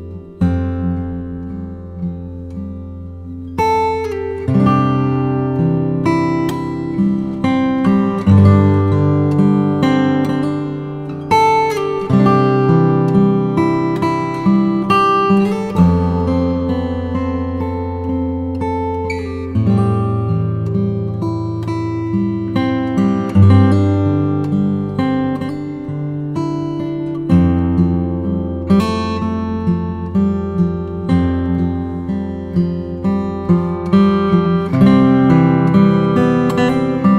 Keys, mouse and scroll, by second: 0.8 Tab, 1.8 KP_7, 2.9-4.1 drag, 4.7 click, 5.6-8.7 drag, 10.0 click, 11.2 Tab, 11.7 Tab, 12.4 r, 12.7 x, 13.3 9, 13.5 0, 14.0 click, 14.6 KP_1, 18.4 ctrl+a, 20.8-22.5 typing, 22.9 click, 23.2-24.0 middle drag, 24.0 Tab, 25.0 a, 25.4 r, 25.7 y, 28.1 click, 28.4-30.2 middle drag, 30.2 r, 30.5 y, 31.7 click, 31.9 Tab, 32.7-33.9 drag, 34.8 click, 36.7-37.1 drag.